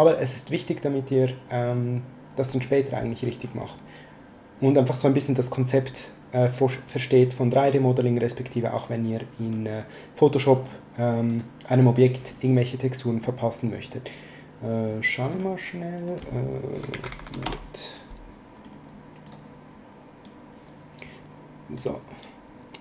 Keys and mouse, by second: 0.5 click, 7.6 click, 11.3 click, 16.1 click, 16.7-17.6 typing, 19.3 click.